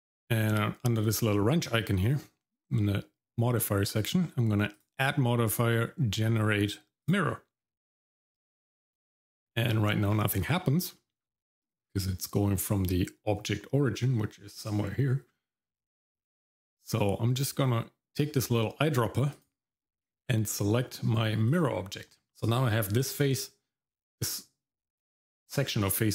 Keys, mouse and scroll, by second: 2.0 click, 4.7-7.1 drag, 8.8 shift+middle click, 9.7 middle click, 10.1-10.5 scroll down 1, 10.6 shift+middle click, 11.0 middle click, 11.3-12.6 scroll up 2, 12.6-13.2 scroll down 1, 19.3 click, 22.3 middle click.